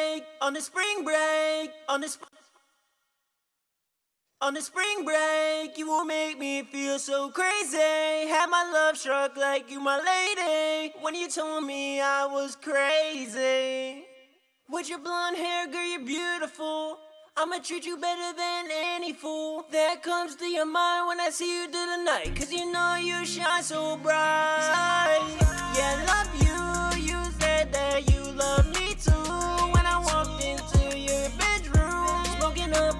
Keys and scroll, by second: 0.0-0.5 typing, 1.2 ctrl+super+w, 2.3 super+`, 8.0 super+`, 19.6 ctrl+super+w, 22.8 super+s, 24.2 super+Tab.